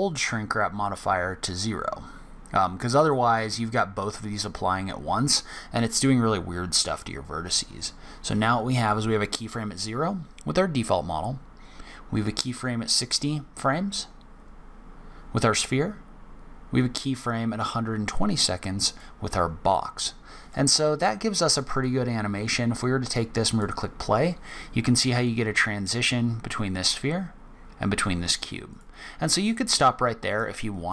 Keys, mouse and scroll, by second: 1.5 click, 4.0 click, 5.9 click, 20.5 middle click, 21.8 click, 23.5 click, 28.7 click, 29.5 click.